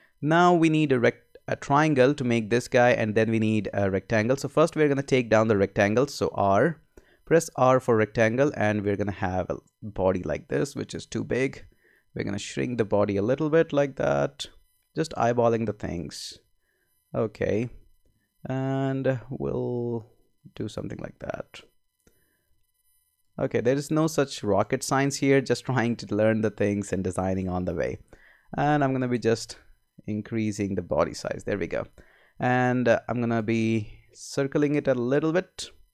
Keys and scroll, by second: 6.2 r, 29.3 Up.